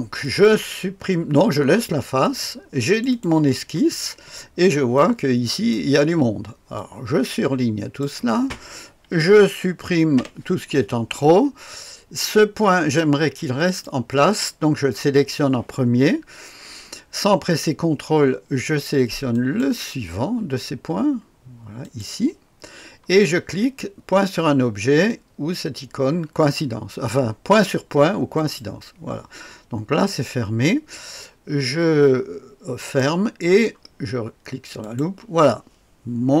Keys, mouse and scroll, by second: 0.2 click, 2.2 click, 2.9 click, 4.6-5.7 scroll up 2, 4.9-5.7 right drag, 6.7-8.0 drag, 10.1 Delete, 13.5 click, 19.3 click, 21.8 click, 28.3 click, 32.8 click, 34.8 click, 35.1 click.